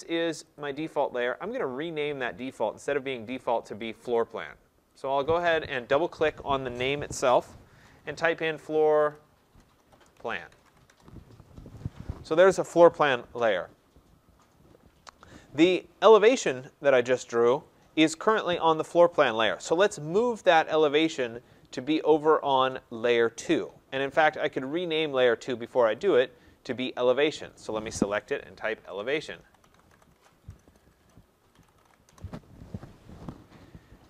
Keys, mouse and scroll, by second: 0.5 click, 3.9 click, 4.1 click, 5.4 click, 8.6-10.7 typing, 10.9 Return, 12.4 typing, 14.1 middle click, 14.2 middle click, 22.3 click, 26.0 click, 26.2 click, 28.8 click, 28.8-32.1 typing, 32.1 Return.